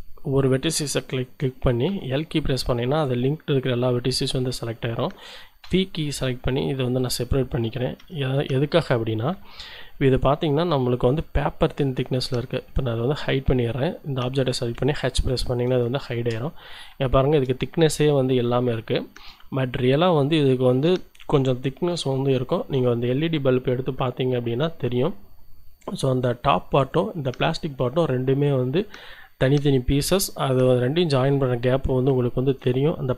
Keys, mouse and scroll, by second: 1.8 l, 5.6 p, 7.0 click, 8.0 Tab, 9.6 a, 10.1-11.2 right drag, 11.4 middle click, 11.8-13.1 scroll up 2, 13.1 middle click, 15.0 h, 15.9-16.9 shift+middle drag, 17.0 shift+middle click, 18.8 shift+middle click, 19.5-20.9 shift+drag.